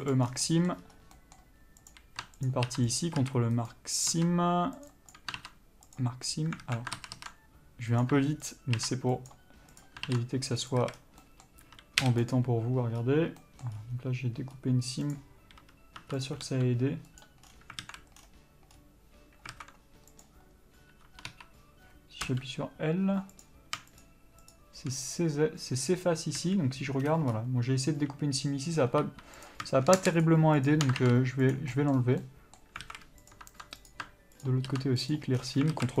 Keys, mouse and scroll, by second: 0.4 ctrl+e, 0.5 scroll down 1, 0.7 middle click, 1.1-1.4 scroll up 1, 1.4 middle click, 2.1 click, 2.7 ctrl+click, 3.2 ctrl+e, 5.2 click, 6.3 ctrl+e, 6.9 alt+a, 7.3 ctrl+z, 8.2 click, 8.8 ctrl+click, 9.6 ctrl+e, 10.1 click, 11.0 ctrl+e, 11.1 a, 11.2 scroll down 1, 11.5 middle click, 12.6 u, 15.4 click, 16.7 g, 17.5 right click, 18.1 alt+a, 20.4 click, 21.6 3, 22.5 l, 23.6 click, 24.3 shift+click, 26.7 a, 29.2 2, 29.7 click, 30.5 shift+click, 31.8 ctrl+e, 32.0 middle click, 33.1 alt+a, 33.5 click, 34.7 ctrl+click, 35.4 ctrl+e, 35.6-36.0 scroll down 1.